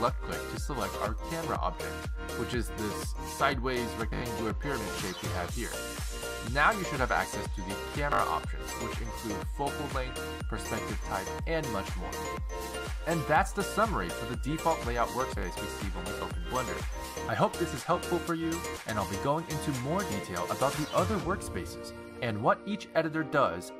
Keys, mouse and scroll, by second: 2.6 click.